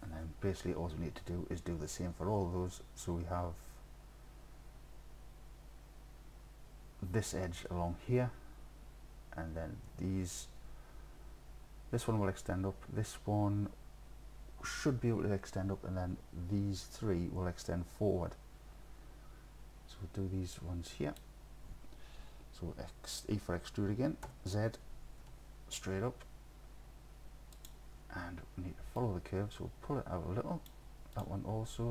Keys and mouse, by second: 20.6-21.2 drag, 24.3 e, 25.2 z, 27.6 click, 29.0-30.7 drag.